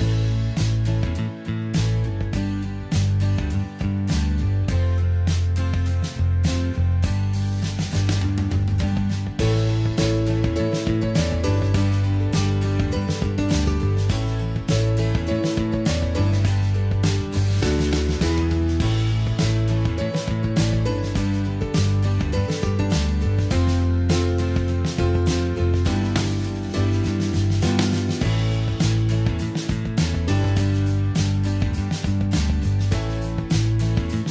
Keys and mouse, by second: 2.1 middle drag, 2.7 a, 10.1 g, 11.9-12.7 middle drag, 16.2-18.3 middle drag, 18.8-21.5 right drag, 22.6 ctrl+shift+c, 26.9 middle click, 27.2-29.3 drag, 29.3 a, 30.3 g, 31.9-32.8 drag, 33.7 middle click.